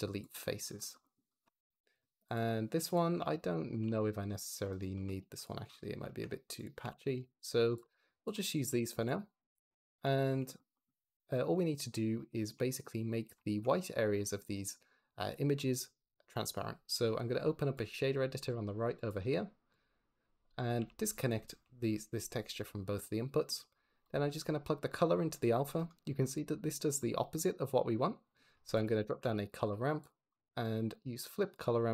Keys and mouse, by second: 1.9 middle click, 2.1 click, 3.0 Tab, 3.4 click, 3.7 g, 4.2 Escape, 5.1 x, 6.7-9.9 typing, 7.6 click, 8.4 click, 9.5 click, 10.0 shift+click, 13.0 middle drag, 13.3 shift+click, 17.6 click, 18.8-19.7 drag, 20.3 click, 20.6 g, 21.2 ctrl+click, 22.4 n, 23.9 click, 26.4 middle click, 26.5 click, 26.9 shift+middle drag, 27.9 middle click, 28.5 shift+a, 30.2 click, 30.9-31.4 drag.